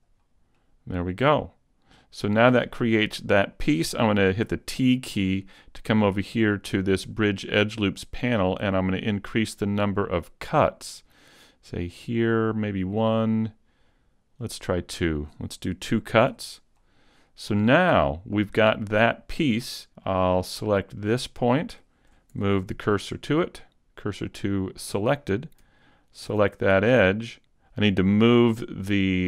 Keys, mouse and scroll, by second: 0.5 middle click, 4.5 t, 5.9 scroll up 1, 8.3 click, 12.0 click, 14.2 click, 14.4 click, 16.3 t, 16.8 middle click, 20.3 middle click, 21.8 middle click, 21.8 right click, 22.3 shift+s, 26.1 alt+right click, 26.8 middle click, 27.4 right click, 27.4 s.